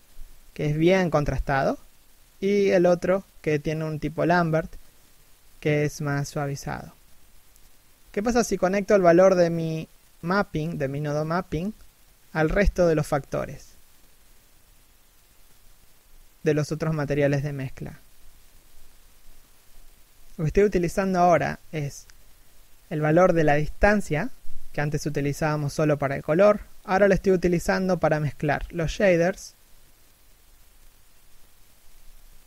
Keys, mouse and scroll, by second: 5.8 scroll down 1, 6.3 scroll up 1, 7.9-8.3 scroll down 1, 11.8 scroll down 1, 12.1 scroll up 1, 13.5 scroll down 1, 14.0-14.5 scroll up 1, 17.6 scroll down 1, 18.0 scroll up 1, 19.3 shift+middle click, 20.0-20.4 scroll down 1, 21.0 r, 21.2 right click, 21.3 r, 25.0 scroll up 1, 26.3 middle click, 29.1-30.2 scroll down 1, 30.2 r, 31.1-31.9 scroll up 1.